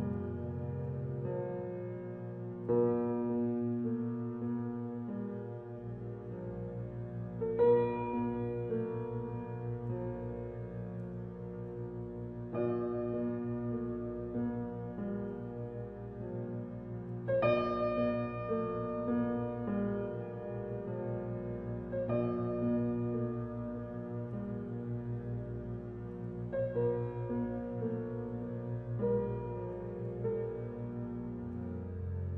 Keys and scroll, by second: 26.7 ctrl+j.